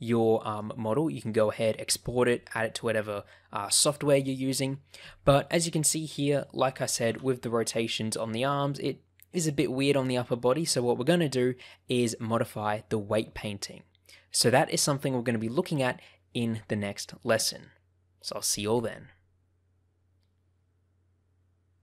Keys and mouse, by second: 1.2 shift+middle click, 6.0 click, 7.0 r, 8.5 right click.